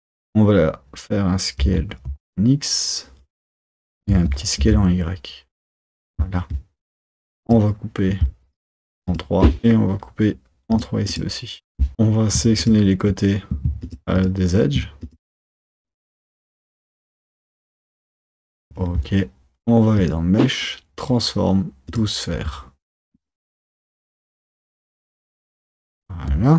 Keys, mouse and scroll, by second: 0.0 Tab, 1.7 s, 7.1-9.6 drag, 9.6-11.9 drag, 12.7-14.4 shift+drag, 15.1 click, 15.9 click, 16.9 alt+shift+click, 17.4 alt+shift+click, 17.9 alt+shift+click, 18.5 alt+shift+click, 20.1-23.0 drag.